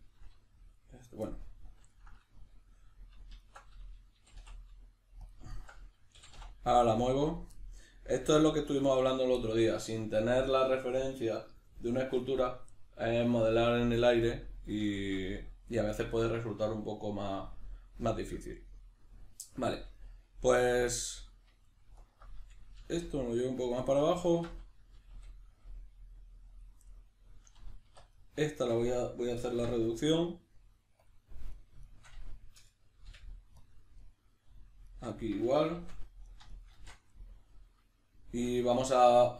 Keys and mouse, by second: 0.7 right click, 1.3-3.4 middle drag, 3.4 alt+right click, 4.1 g, 5.3 click, 5.5 alt+right click, 6.1 g, 7.4 click, 7.5-22.0 middle drag, 22.0 alt+right click, 22.8 g, 23.9 click, 24.2 alt+right click, 24.9 g, 26.6 click, 26.9-28.1 middle drag, 28.0 1, 28.1 right click, 28.5 shift+right click, 29.5 m, 31.5 right click, 31.9 shift+right click, 33.1 m, 34.0 middle click, 34.9 right click, 35.1 shift+right click, 35.7 shift+r, 36.3 right click, 36.5 shift+right click, 36.7 shift+r, 37.1-39.3 middle drag.